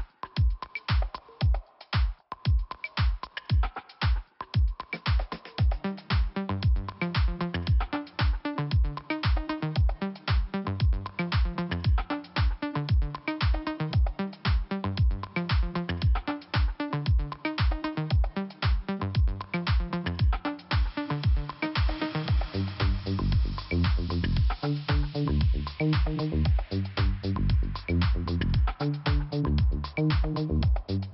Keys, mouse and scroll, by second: 0.3-1.0 scroll down 1, 1.1-1.5 scroll up 1, 2.2 click, 5.5 click, 5.6 click, 6.2 scroll up 1, 6.9 click, 8.3 click, 9.7 click, 10.5 click, 13.4 right click, 13.5 right click, 14.1 click, 15.7 click, 17.3 click, 17.6 right click, 19.0 right click, 19.1 click, 19.2 click, 19.5 right click, 19.6 right click, 19.8 right click, 19.8 double right click, 20.2 click, 20.3 click, 20.7 double right click, 20.7 double right click, 20.8 click, 20.9 click, 21.0 click, 21.1 double click, 22.7 click, 23.3 click, 23.3 click, 24.3 click, 24.3 click, 24.9 click, 25.7 click, 27.2 click, 29.2 click.